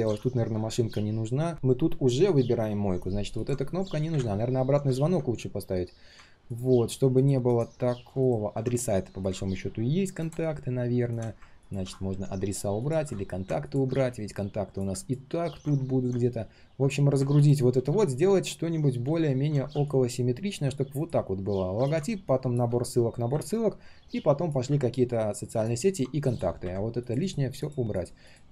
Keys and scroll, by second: 17.7 ctrl+z, 18.2 ctrl+z, 18.3 ctrl+z.